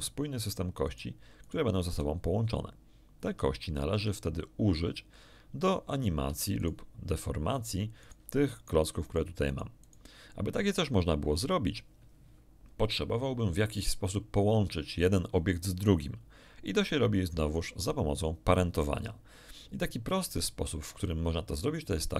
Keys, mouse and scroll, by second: 0.4 right click, 0.8 right click, 1.4 right click, 1.8 g, 3.9 Escape, 6.2 Tab, 6.6 right click, 7.5 right click, 8.0 right click, 8.5 right click, 9.0 right click, 9.4-10.1 right drag.